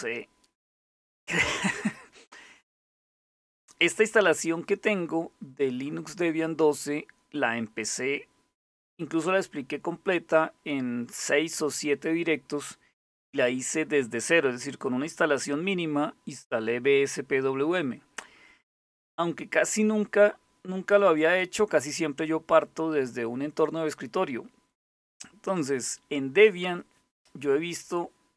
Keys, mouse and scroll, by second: 20.8 click.